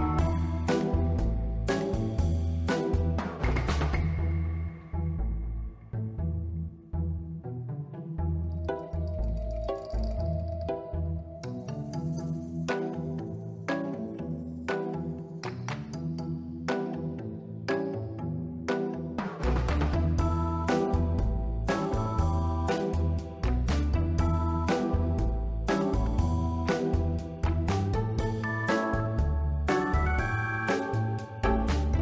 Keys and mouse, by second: 0.0 click, 2.1 click, 3.9 ctrl+middle click, 5.3 click, 10.4 click, 11.1 click, 14.3 click, 17.5 Tab, 17.7-18.7 middle drag, 18.9 Tab, 19.3 middle click, 19.6 1, 20.1 b, 20.8-21.6 drag, 22.0 ctrl+z, 22.6 b, 23.6 click, 24.8 r, 25.1 y, 25.9 click, 26.3 middle click, 27.0 click, 27.2 b, 28.3 middle click, 28.8 shift+middle click, 29.7 r, 30.1 y, 31.2 click, 31.9 middle click.